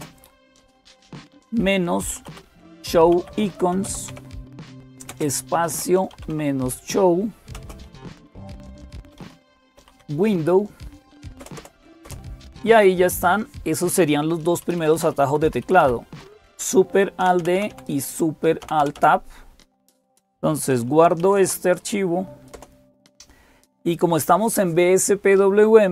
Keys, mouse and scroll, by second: 0.0-25.9 typing.